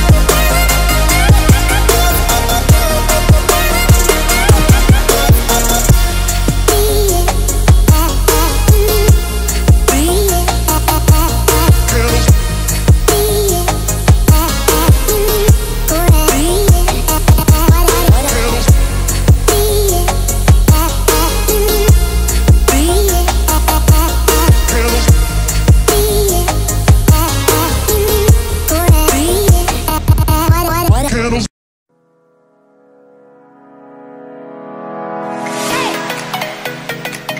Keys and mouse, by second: 0.0 g, 1.2 Tab, 2.5 1, 2.8 right click, 3.3 shift+right click, 3.6 shift+right click, 4.0 shift+right click, 4.1 middle click, 4.3 shift+click, 6.6 ctrl+b, 14.5 ctrl+i, 16.4 x, 18.5-19.8 drag, 20.2 a, 20.9 click, 22.3 middle click, 23.2-25.0 drag, 25.7 alt+e.